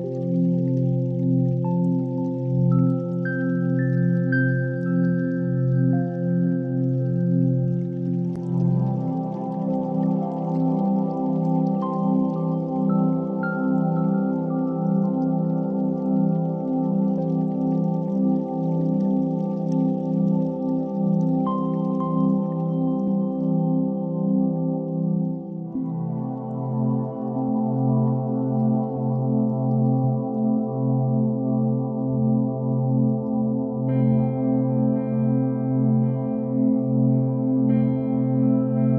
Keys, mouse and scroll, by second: 2.4-4.3 shift+drag, 4.3 ctrl+a, 6.6-7.3 middle drag, 7.3 click, 7.6-8.1 scroll down 3, 8.1-10.1 middle drag, 10.1 KP_1, 10.8 shift+a, 13.3-15.4 drag, 15.4-15.9 shift+middle drag, 15.9 g, 16.7 s, 18.3 Tab, 18.9 1, 20.3 alt+z, 20.6 click, 21.3 ctrl+b, 26.0 click, 26.6 g, 29.4 Tab, 29.5-30.1 scroll up 4, 30.1-33.1 shift+middle drag, 33.3 s, 35.2 s, 36.3 alt+z, 37.0-38.0 middle drag, 38.0-38.4 scroll up 5, 38.4 Tab, 38.6 2.